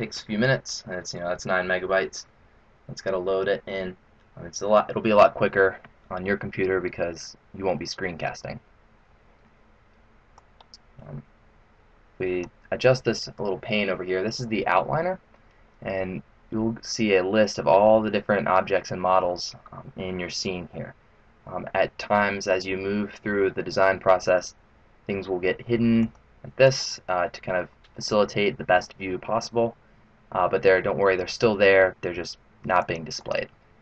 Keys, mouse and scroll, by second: 6.9-7.3 scroll down 4, 10.4 click, 26.0 click, 26.7 click, 32.7 click, 33.2 click.